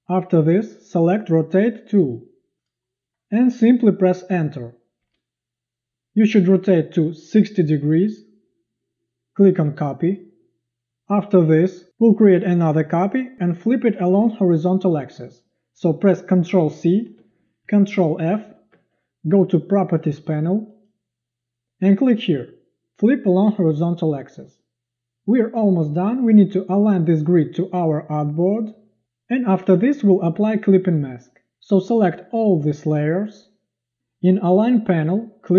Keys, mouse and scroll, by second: 5.0 Return, 12.3 click, 17.0 ctrl+c, 18.4 ctrl+f, 27.5 click, 32.6 drag.